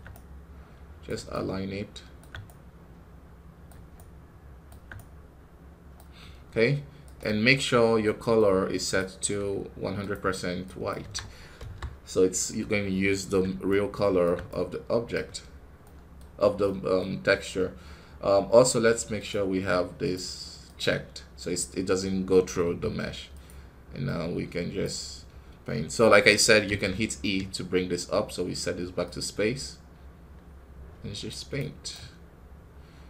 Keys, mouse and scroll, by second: 11.5 click, 13.6-22.5 shift+right drag, 22.5 f, 24.8-26.5 drag, 26.5 e, 28.9-31.4 drag, 31.4-33.0 right drag.